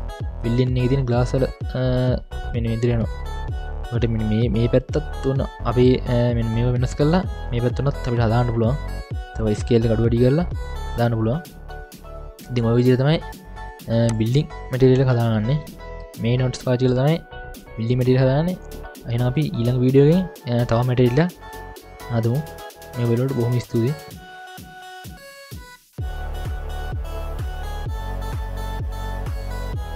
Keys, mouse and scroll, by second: 0.1-0.6 scroll down 1, 0.6-3.1 middle drag, 0.6-2.3 scroll down 2, 3.8-4.3 middle drag, 3.8-4.3 scroll up 1, 4.8-5.2 scroll down 2, 5.2-5.7 middle drag, 6.0 scroll up 1, 6.3 middle click, 7.8-8.8 scroll up 3, 8.3-8.8 middle drag, 8.8 scroll up 1, 9.6-10.1 scroll down 2, 10.1-11.1 scroll down 3, 12.3 scroll down 1, 12.5 middle click, 12.9-13.5 scroll down 5, 14.1-16.0 drag, 14.1-16.0 scroll down 2, 16.0 scroll down 1, 16.3-16.9 scroll down 1, 16.9 scroll down 2, 17.8 middle click, 18.8 click, 26.9 click, 27.4 middle click, 27.5-27.8 scroll up 8, 27.5 middle click, 27.8 middle click, 27.9 click, 28.7 click, 28.7 scroll down 5, 28.8 scroll up 4, 28.9-29.9 middle drag.